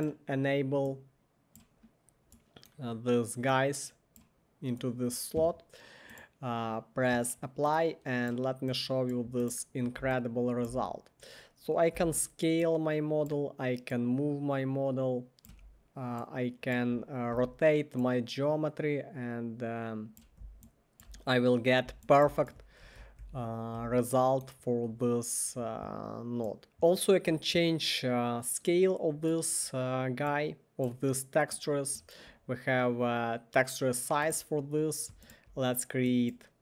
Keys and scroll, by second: 11.9 r, 15.5 w, 17.1-17.8 typing, 22.3-23.8 typing, 35.1 1.